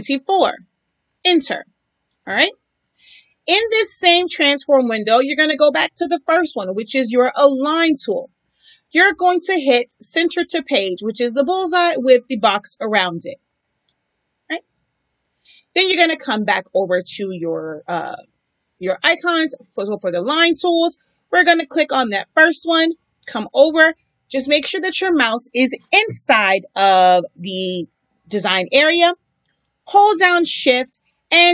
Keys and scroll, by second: 0.1 4, 1.0 Return.